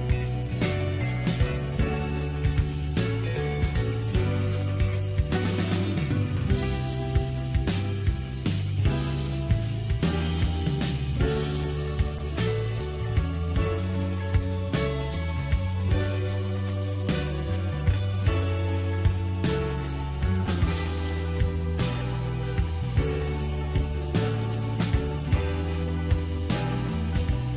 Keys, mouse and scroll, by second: 0.1 KP_3, 1.4 click, 3.1-4.1 drag, 4.1 Tab, 4.5-4.9 scroll up 1, 4.9 shift+middle click, 5.3 scroll up 1, 5.5 shift+middle click, 6.0 click, 6.7 click, 7.2 shift+click, 7.8 shift+click, 8.0-9.0 middle drag, 9.0 click, 9.3 middle click, 9.6-9.9 scroll down 3, 9.9 middle click, 10.5-10.9 scroll up 1, 10.9 shift+click, 11.2 shift+click, 11.4 shift+click, 11.7 shift+click, 11.9 shift+click, 12.0 shift+click, 12.2 middle click, 13.1 shift+click, 13.3 shift+click, 13.5 shift+click, 13.7 shift+click, 13.9-15.1 middle drag, 15.1 shift+click, 15.3 shift+click, 15.5-16.6 middle drag, 16.6 KP_3, 22.7 s, 25.1-26.2 drag, 26.2-26.5 scroll down 2, 26.5 click, 26.9 shift+middle click.